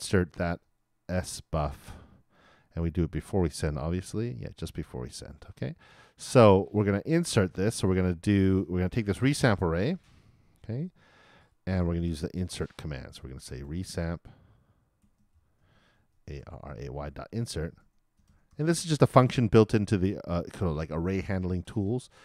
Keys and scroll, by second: 15.7-16.8 typing.